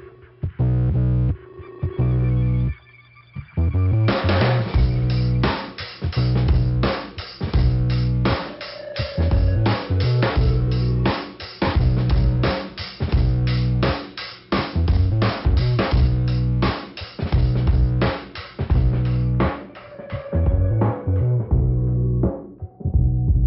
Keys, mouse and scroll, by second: 0.8 scroll down 2, 1.8 click, 1.8 ,, 3.2 click, 3.7 click, 4.7 click, 4.8 click, 5.9 click, 6.4 scroll up 2, 7.3 click, 7.9 click, 8.9 click, 10.0-10.4 scroll down 1, 10.7-11.3 scroll up 2, 11.3-12.3 scroll down 2, 12.6 click, 13.8 scroll up 1, 15.0 click, 15.8 click, 17.2 click, 17.5 scroll down 2, 21.5 click.